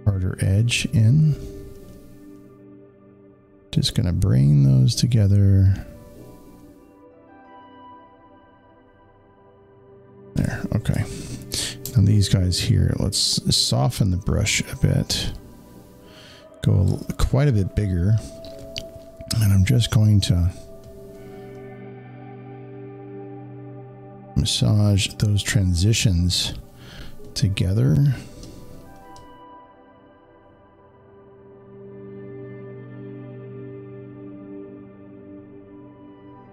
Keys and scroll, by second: 10.1 space, 10.3 space.